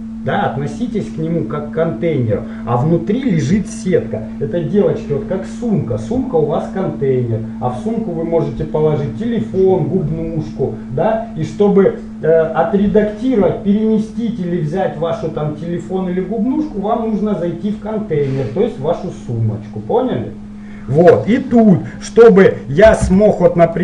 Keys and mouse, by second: 23.1 Tab.